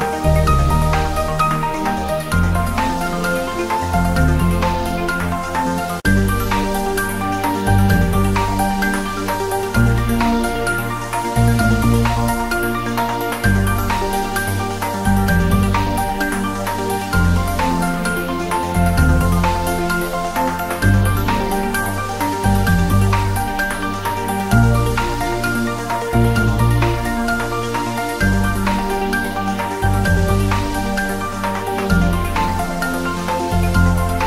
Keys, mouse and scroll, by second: 1.7 click, 2.0 scroll down 1, 2.5-5.9 typing, 2.9 click, 3.0 scroll up 1, 3.5 click, 4.1 click, 5.0 click, 6.4-7.3 drag, 12.5-13.0 scroll up 1, 13.0 click, 13.9 Return, 14.6 scroll down 1, 15.0-17.9 typing, 15.3 click, 15.9 click, 16.9 click, 17.9 click, 18.4-18.8 scroll up 1, 18.8-20.0 drag, 31.9-32.5 click, 32.8-33.5 scroll up 2, 33.1 click, 33.8-34.1 scroll down 1.